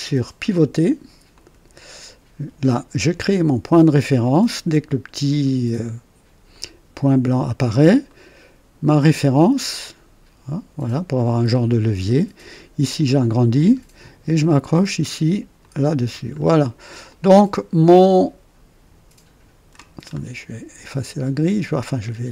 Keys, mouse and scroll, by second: 1.2 click, 6.4 click, 8.0 right click, 10.7 click, 12.0 right click, 12.8-13.7 scroll up 4, 15.5 click, 16.3-16.7 scroll down 2, 17.0-19.9 drag, 19.9 scroll down 1, 22.2 click.